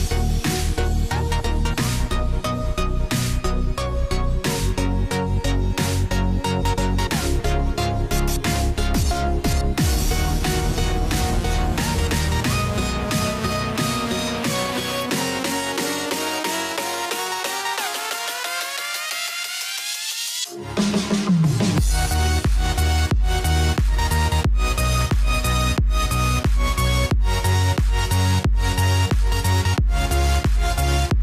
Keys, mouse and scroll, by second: 3.0 click, 3.0-6.7 drag, 7.4 click, 12.1 ctrl+click, 16.0 ctrl+click, 18.0 ctrl+shift+i, 28.4 ctrl+Num_Lock, 29.3 ctrl+f.